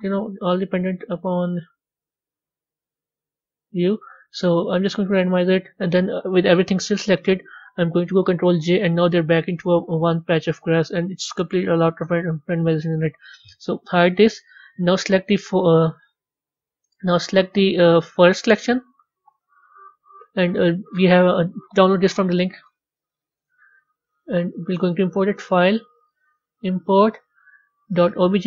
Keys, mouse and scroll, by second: 5.3 click, 8.4 ctrl+j, 10.3-12.8 middle drag, 12.8 click, 14.4 click, 16.2 click, 16.5 click, 18.2 click, 18.9 click, 19.2-21.3 drag, 25.1-28.2 drag.